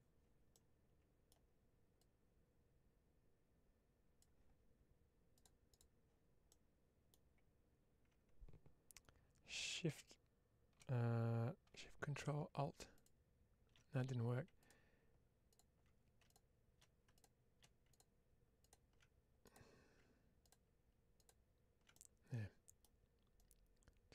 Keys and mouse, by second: 0.4 middle click, 1.9-4.1 drag, 5.7 click, 6.4 middle click, 12.8 ctrl+alt+shift+click, 19.3 click, 21.8 middle click, 23.3-24.1 drag.